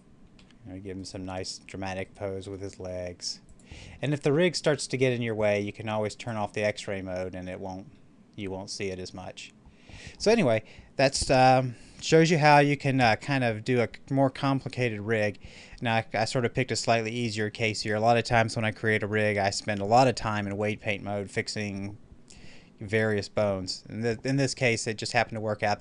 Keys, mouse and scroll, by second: 0.2 r, 0.9 right click, 2.2 r, 3.3 click, 3.8-6.1 middle drag, 6.1 click, 6.8 middle click, 7.4 scroll down 1, 7.8 middle click, 7.9-12.4 middle drag.